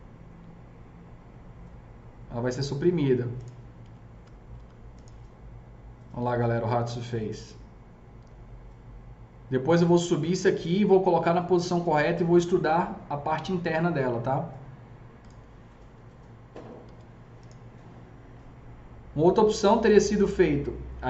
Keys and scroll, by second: 3.7 F4, 4.1 F4, 4.4 F4, 15.9 F3, 16.4 F4, 16.7 F3.